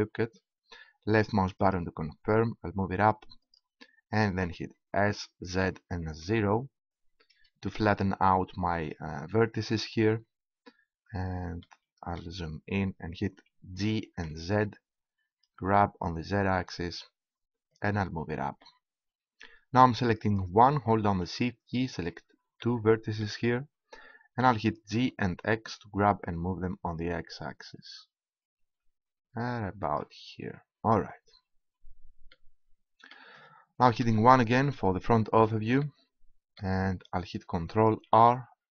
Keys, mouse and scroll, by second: 4.9 s, 9.9-11.7 drag, 11.7-12.9 right drag, 13.7 g, 18.3-19.6 drag, 20.2-23.6 right drag, 23.6 click, 24.4 g, 34.0 KP_1, 34.3-36.9 drag, 34.3-36.9 middle drag, 34.3-36.9 right drag, 37.5-38.6 middle drag, 38.6 ctrl+r.